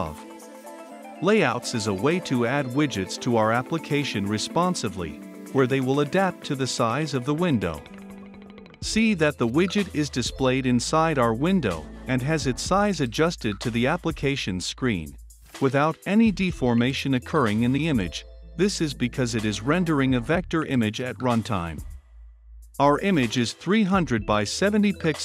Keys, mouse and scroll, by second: 1.3-5.7 typing, 3.7 click, 5.9 click, 6.2 Return, 6.7 click, 7.0-9.0 typing, 7.1 click, 9.2 click, 9.6 ctrl+F5, 11.9-25.0 drag, 25.0-25.2 typing.